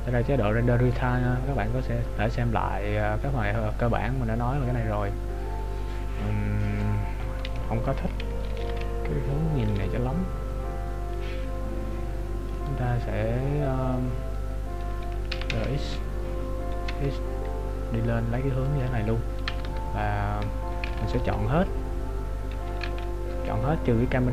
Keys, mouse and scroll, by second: 8.7 ctrl+alt+b, 11.6 right click, 15.5 r, 19.7 Tab.